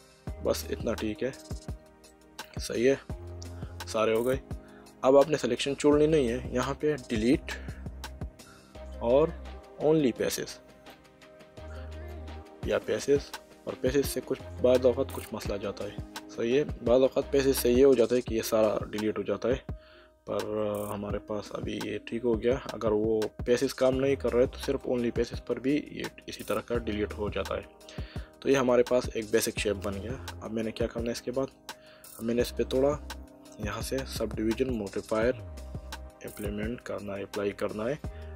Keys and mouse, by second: 1.4 click, 2.1 middle click, 10.9 click, 12.8 click, 20.5 middle click, 26.1 middle click, 31.2 middle click, 33.6 click, 38.0 click.